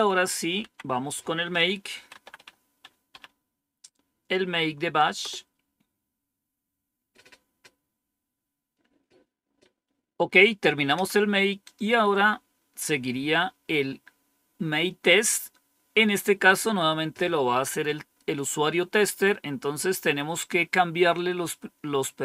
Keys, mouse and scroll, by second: 0.5 Down, 1.6-3.0 typing, 5.1 Return, 9.4 Up, 10.9 Down, 12.7-13.6 scroll down 1, 19.2-20.0 scroll down 2.